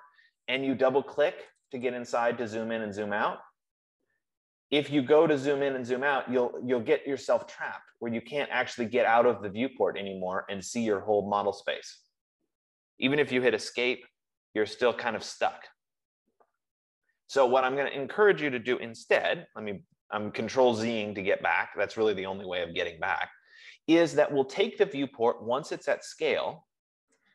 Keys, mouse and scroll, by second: 2.0 click, 2.3 click, 4.7 scroll, 5.4-6.5 scroll, 7.1-8.2 scroll, 8.2 scroll, 9.1-9.5 scroll, 9.7-10.8 scroll, 11.1 scroll, 12.3 scroll, 13.9 Escape, 14.4-15.0 scroll, 15.4 scroll, 16.3 scroll, 17.0-17.5 scroll, 18.1 Escape, 18.3 Escape, 19.4 ctrl+z, 20.0 ctrl+z, 21.0 ctrl+z, 21.2 ctrl+F15, 23.8 Escape, 26.5 click.